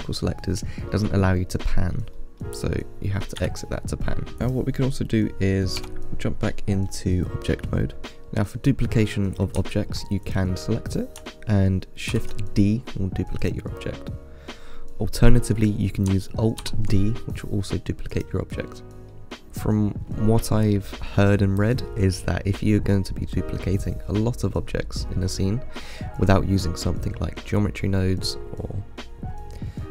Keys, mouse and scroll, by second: 3.9 middle click, 4.6 click, 6.0 Tab, 8.0-10.5 middle drag, 10.5 click, 12.3 shift+d, 16.8 alt+d, 18.8-19.5 middle drag, 23.3-23.8 middle drag, 23.8-24.3 scroll down 4, 24.3-25.5 middle drag, 25.5-26.0 scroll up 4, 26.0-29.1 middle drag.